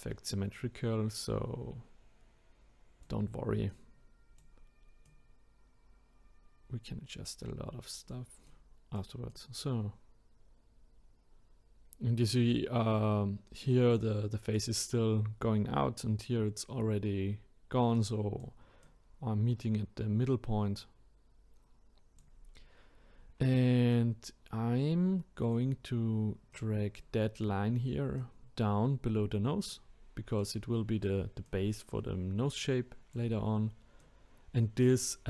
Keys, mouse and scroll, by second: 3.7-5.1 drag, 8.5-12.3 drag, 17.9 click, 18.8 click, 23.9 click, 26.5-28.3 drag, 30.4 click, 31.4 click, 34.0 click.